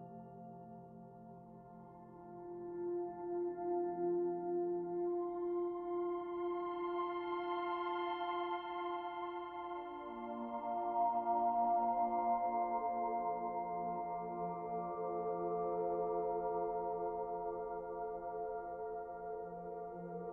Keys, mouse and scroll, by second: 1.1 middle click, 2.3 click, 3.1 e, 4.4-4.7 scroll down 1, 4.7 middle click, 6.5 click, 7.3 e, 8.7 e, 10.2 click, 10.5 middle click, 11.6 e, 12.4 middle click, 13.9 click, 15.2 middle click, 17.5 e, 18.8 e.